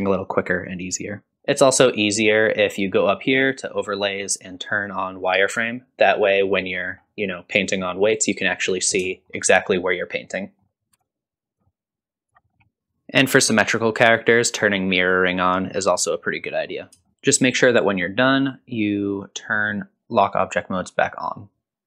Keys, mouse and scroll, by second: 1.4 middle click, 1.4 ctrl+click, 4.0-5.9 drag, 6.8 middle click, 8.8 scroll up 1, 9.1 shift+middle click, 9.5 scroll up 2, 9.6-10.4 scroll down 1, 10.4 middle click, 10.6 scroll down 1, 10.9 f, 11.0 click, 11.6 middle click, 11.8 click, 12.3 scroll down 2, 12.4 middle click, 12.5-13.3 scroll up 2, 13.3 ctrl+z, 13.3 click, 13.3 middle click, 13.3 scroll down 3, 15.0 click, 16.5 scroll up 1, 17.1 shift+middle click, 17.1 click, 18.4-21.4 drag.